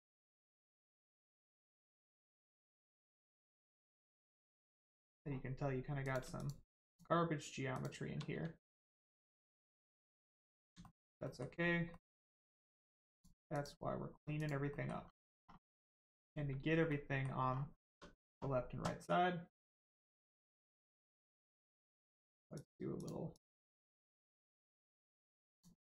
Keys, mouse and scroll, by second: 0.2 click, 0.9 middle click, 1.8 shift+middle click, 2.6 middle click, 2.6 middle click, 3.2-3.6 scroll down 1, 3.6 middle click, 5.2 scroll up 1, 6.0 click, 6.4 shift+click, 6.9 shift+click, 7.7 shift+click, 8.3 x, 9.0 click, 10.2 middle click, 10.8 shift+middle click, 11.2 middle click, 11.3 middle click, 11.5-11.9 scroll up 1, 11.9 middle click, 12.7 click, 13.1 shift+click, 14.3 click, 14.7 middle click, 15.4 scroll down 1, 15.7 middle click, 16.3 Caps_Lock, 16.9 middle click, 17.5-17.9 scroll down 1, 17.9 Tab, 21.2 click, 23.3 click, 25.5 click.